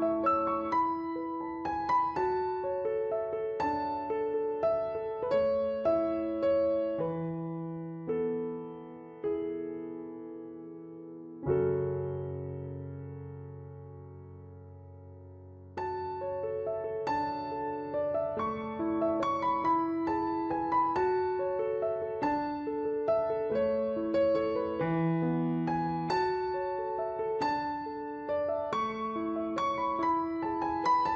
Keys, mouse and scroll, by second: 2.7 ctrl+z, 4.2 click, 11.2 click, 15.7 right click, 16.2 click, 16.8 w, 17.0 click, 18.3 right click, 18.7 click, 21.4 click, 25.2 z, 25.6 click.